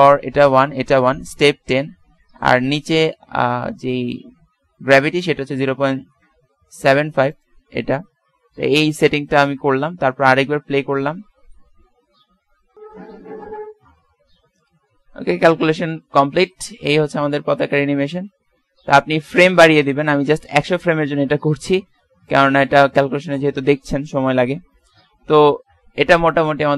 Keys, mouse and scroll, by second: 7.1 ctrl+s, 10.4 alt+a, 18.8 Escape, 22.4 click.